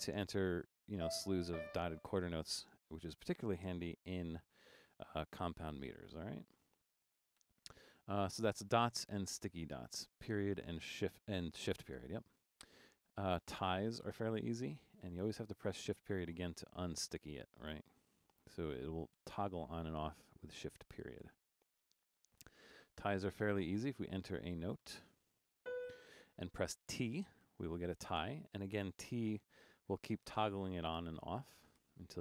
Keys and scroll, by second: 1.0-1.5 typing, 4.9-7.4 typing, 15.8 shift+>, 19.2 shift+>, 21.3 shift+>, 23.3 Down, 23.5 Down, 24.8-25.6 typing, 27.2-28.0 typing, 30.2-31.8 typing.